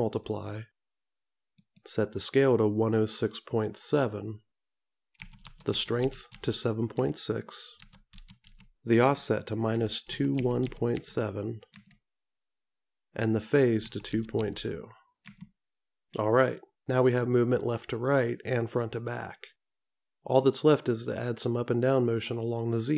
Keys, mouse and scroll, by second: 0.5 click, 3.2 click.